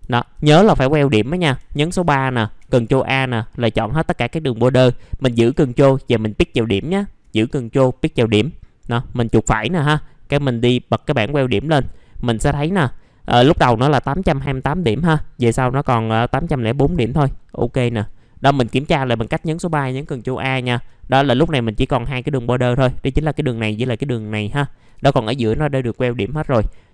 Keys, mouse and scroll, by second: 0.0 alt+middle click, 0.5 right click, 1.2 middle click, 1.2 scroll down 1, 3.6-4.8 scroll up 1, 4.8 middle click, 6.3 ctrl+click, 7.5-9.1 scroll up 1, 9.1 right click, 10.5 click, 11.3 middle click, 16.8 click, 17.2-19.2 middle drag, 19.2 3, 20.1 scroll down 1, 20.5 alt+middle click, 22.0-23.2 drag, 24.5-24.8 scroll up 1, 26.3 click.